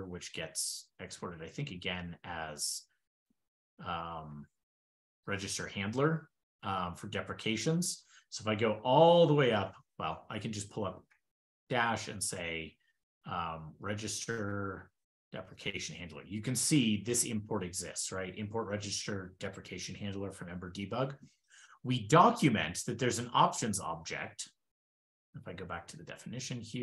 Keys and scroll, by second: 3.8 super+f, 4.1 super+g, 4.5 super+g, 5.9 super+g, 8.0 shift+super+\, 9.5 ctrl+alt+d, 13.0 super+a, 23.7 ctrl+alt+d.